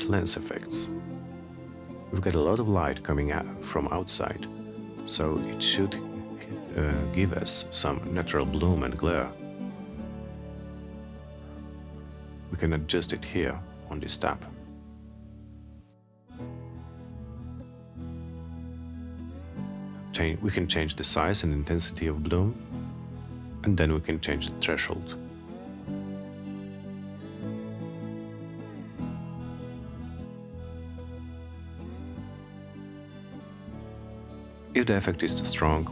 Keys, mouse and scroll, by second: 0.7 click, 4.5 click, 10.5-11.6 drag, 13.4 Return, 16.9 click, 20.4 Return, 25.0-26.2 drag, 27.7 Return, 34.8-35.9 drag.